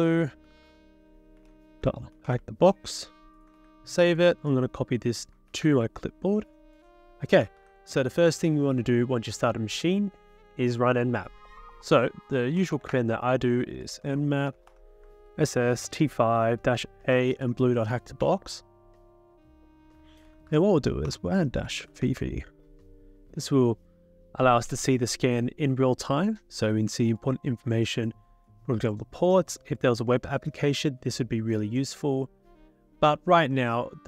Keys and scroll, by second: 2.3 ctrl+v, 3.3-4.1 typing, 5.3-6.0 typing, 7.6 ctrl+s, 12.4-15.1 typing, 15.2 ctrl+Right, 15.8 ctrl+Right, 16.6 ctrl+Right, 16.9-18.2 typing, 18.2 ctrl+Right, 20.0 Return, 20.2-22.7 typing.